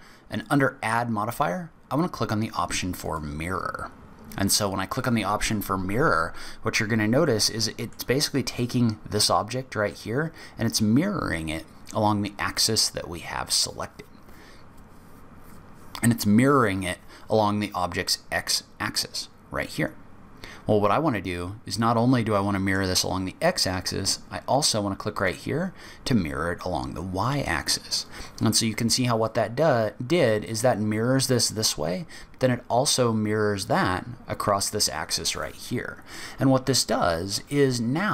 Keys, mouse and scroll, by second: 0.3 click, 7.3 middle click, 21.7 middle click, 25.1 click, 35.4 middle click.